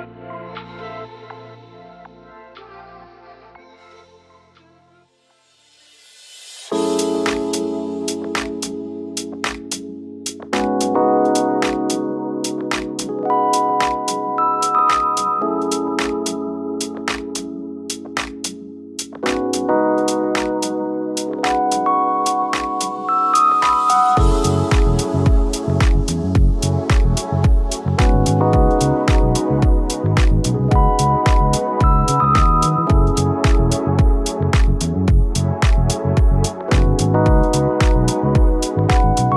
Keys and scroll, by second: 7.8 shift+Up, 8.1 shift+Up, 9.2 shift+Up, 9.3 shift+Up, 12.3 b, 17.1 Caps_Lock, 21.9 v, 22.9 ctrl+i, 24.2 v, 25.3-26.0 space, 38.2 space.